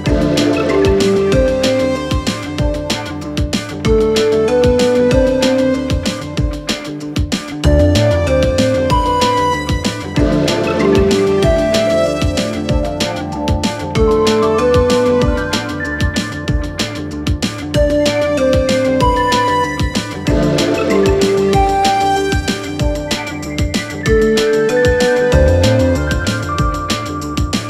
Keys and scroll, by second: 22.3 space, 24.3 space.